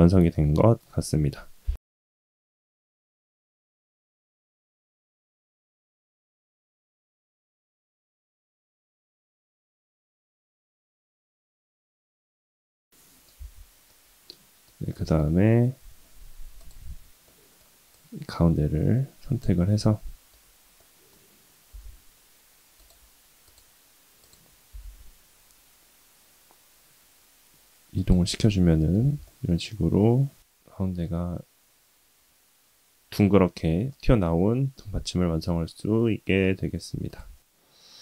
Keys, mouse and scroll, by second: 0.3-0.8 middle drag, 3.4 click, 3.6 click, 4.1 middle click, 4.7 middle click, 5.6 s, 7.2 KP_3, 8.1 s, 9.3 g, 10.3 r, 10.8 g, 11.8 r, 12.5 middle click, 13.3 Tab, 13.9 middle click, 14.9 middle click, 16.6 click, 17.2 middle click, 17.9-19.4 drag, 19.7 middle click, 20.8 middle click, 21.7 g, 23.4-24.5 drag, 24.7 g, 28.2 middle click, 29.0 Tab, 29.2-29.6 middle drag, 30.0-31.2 middle drag, 33.9-35.5 middle drag, 35.9-36.3 middle drag, 37.1 click.